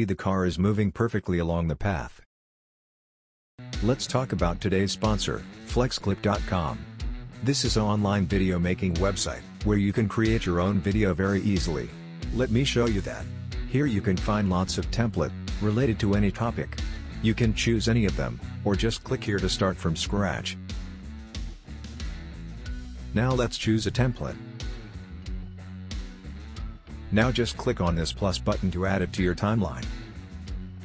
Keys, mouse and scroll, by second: 2.2 space, 2.7-3.7 scroll down 1.